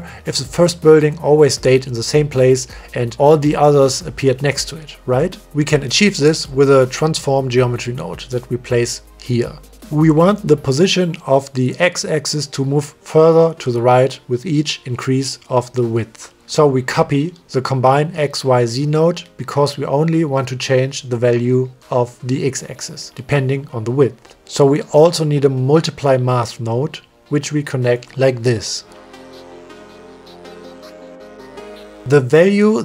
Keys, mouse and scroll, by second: 0.6 shift+middle drag, 5.2 middle click, 5.7 middle click, 6.1 click, 6.6 click, 7.4 middle click, 7.8 shift+a, 10.1 click, 11.0 click, 11.3 click, 11.6 click, 13.2 middle click, 17.3 click, 17.8 shift+d, 19.4 click, 19.7 click, 21.0 click, 23.6-24.5 drag, 26.4 click, 26.7 shift+d, 27.9-29.1 drag, 29.5 click, 30.8 click, 31.3 click, 32.1 click, 32.3 click.